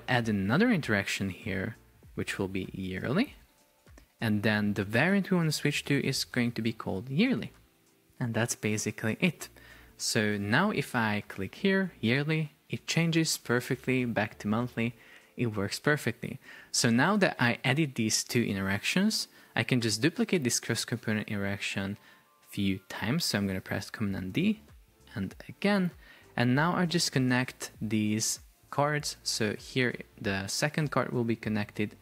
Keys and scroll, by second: 3.5 Return, 5.8 shift+y, 7.3 Return, 10.5 super+p, 15.6 Escape, 24.4 super+d.